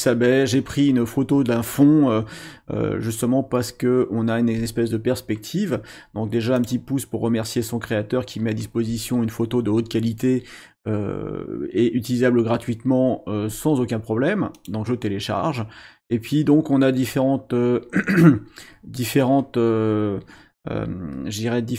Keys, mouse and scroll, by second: 6.6 click, 14.5 click.